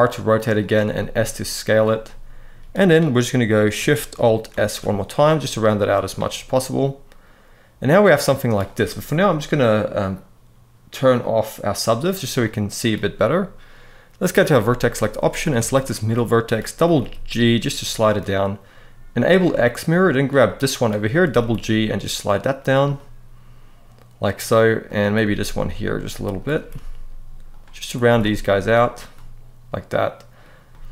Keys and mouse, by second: 0.3 click, 0.6 s, 1.4 click, 1.7 middle click, 4.3 alt+shift+s, 5.5 click, 6.3-8.2 middle drag, 11.6 click, 12.1 middle click, 13.9 click, 14.3 middle click, 15.0 click, 15.4 shift+middle click, 15.8 middle click, 16.6 g, 16.7 g, 17.8 click, 19.0 click, 19.9 click, 20.2 middle click, 20.9 g, 21.1 g, 22.3 click, 22.7-24.1 middle drag, 24.6 click, 24.9 g, 25.1 g, 25.7 click, 26.1 click, 26.3 g, 26.5 g, 27.2 click, 27.6 click, 27.8 g, 28.0 g, 28.6 click, 28.9-30.1 middle drag, 30.4 middle click.